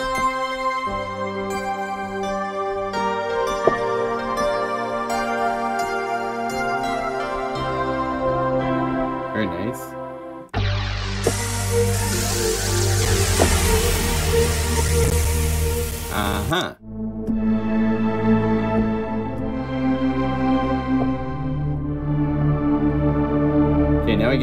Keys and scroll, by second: 6.4 F4, 8.4 F3, 12.0 F3, 13.0 F1, 13.0 F2.